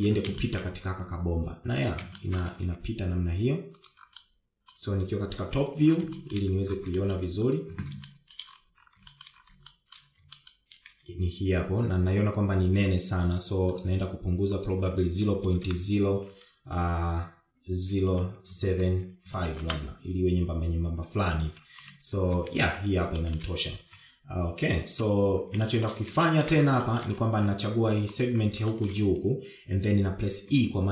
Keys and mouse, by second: 1.2 shift+middle click, 1.8 shift+middle click, 3.6 shift+middle click, 4.0 g, 5.6 middle click, 6.8 KP_7, 7.6 shift+middle click, 8.4 shift+middle click, 9.4 shift+middle click, 10.5 shift+middle click, 11.1 shift+middle click, 11.7 shift+middle click, 12.1 shift+z, 15.2-21.8 drag, 17.0 BackSpace, 23.2 KP_1, 23.8 shift+z, 24.6 shift+middle click, 25.2 KP_7, 26.3 KP_1, 27.0 shift+middle click, 27.6 shift+middle click, 28.2 shift+middle click, 29.5 click, 30.1 shift+middle click.